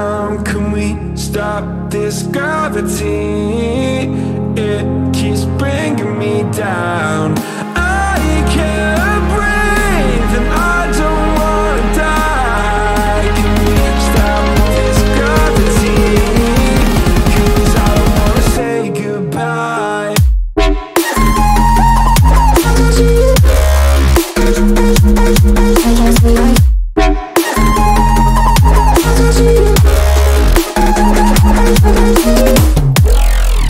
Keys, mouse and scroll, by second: 4.0-8.3 drag, 9.2 click, 10.2 click, 14.3-15.0 drag, 16.5 x, 17.8-22.5 drag, 23.3 click, 28.9-31.0 drag, 31.9 click, 32.9-33.6 drag.